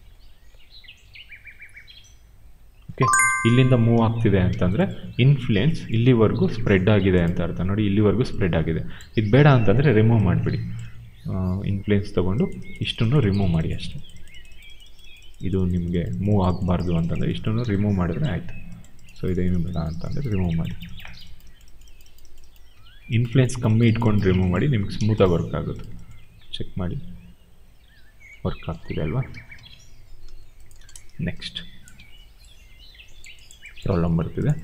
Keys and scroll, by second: 3.9 ctrl+z, 4.4 q, 10.0 b, 24.8 w, 26.1 e, 28.6 ctrl+z, 29.2 ctrl+a, 30.6 0, 30.7 Return, 31.8 e.